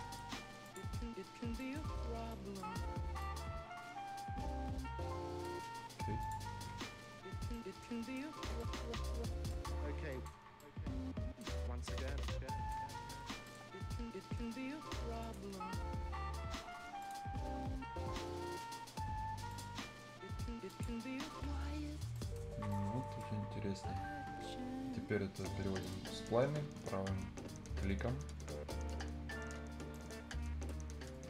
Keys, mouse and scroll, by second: 1.1-1.4 scroll down 1, 1.5 right click, 1.8 scroll up 1, 2.3 right click, 2.6 scroll down 1, 2.9 scroll up 1, 3.2-5.5 right drag, 5.5 scroll down 1, 6.1-6.6 scroll up 2, 6.2 click, 7.2 scroll down 1, 7.5-9.7 right drag, 9.7 scroll up 1, 10.1 right click, 10.3 scroll down 1, 10.5-13.4 right drag, 13.7-14.1 scroll up 1, 15.2 click, 21.9 scroll down 1, 22.1 right click, 22.7 right click, 23.2 scroll down 1, 23.5-23.8 scroll up 1, 27.9-29.1 scroll up 1, 29.9 right click, 31.0 scroll down 1.